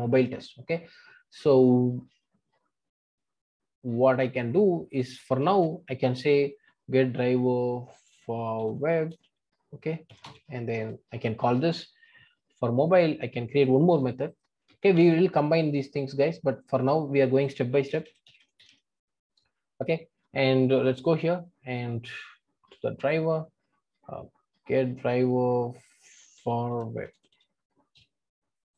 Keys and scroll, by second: 13.9 super+c.